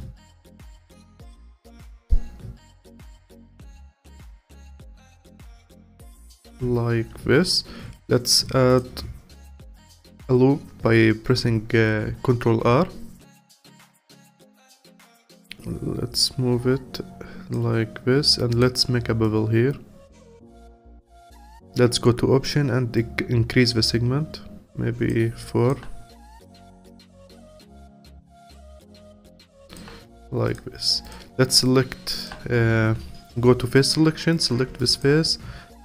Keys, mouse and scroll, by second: 1.9-5.1 drag, 5.5-7.7 alt+drag, 7.7 ctrl+r, 14.0 click, 18.5 click, 21.0-30.5 alt+drag, 31.0 click, 31.6-32.8 alt+drag, 32.8 3, 34.3 click, 34.8-35.8 alt+drag.